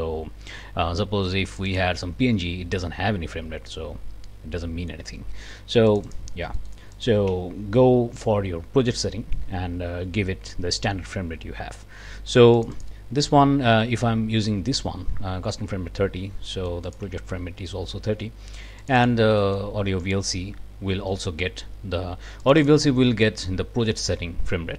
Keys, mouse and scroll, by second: 1.5 click, 5.9 click, 6.5 click, 6.9 click, 7.3 s, 12.6 click, 16.5-17.1 scroll up 1, 17.0 s, 18.8 click, 19.4-19.7 scroll up 2, 19.7 click, 22.4 click, 23.1 click, 23.3 scroll up 1.